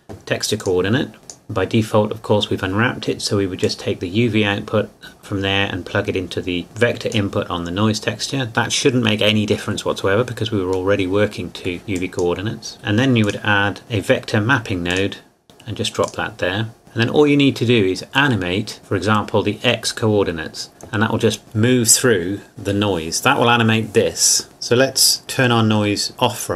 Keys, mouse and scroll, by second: 0.6 click, 3.6 click, 11.0 middle click, 12.0 click, 13.2 click, 14.9 click.